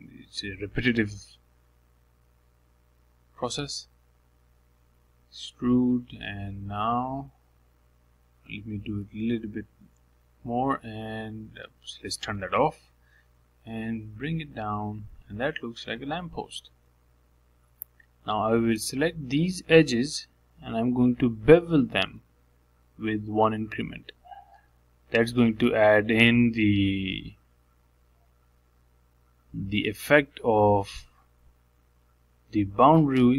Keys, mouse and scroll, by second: 0.1 e, 2.5 e, 4.0 shift+middle click, 4.4 scroll down 1, 4.6 middle click, 5.5 e, 7.0 e, 9.3 ctrl+z, 10.0 e, 12.2 s, 13.6 click, 14.7 s, 19.0 2, 19.5 click, 20.4 shift+click, 20.7 middle click, 21.6 shift+click, 21.9 middle click, 22.6 KP_Decimal, 23.0 middle click, 23.6 scroll down 1, 23.9-25.5 middle drag, 25.5 shift+click, 26.1 shift+click, 26.4-27.4 middle drag, 27.4 shift+click, 27.7-29.7 middle drag, 29.7 ctrl+b, 32.0 middle click, 32.9-33.3 scroll down 1.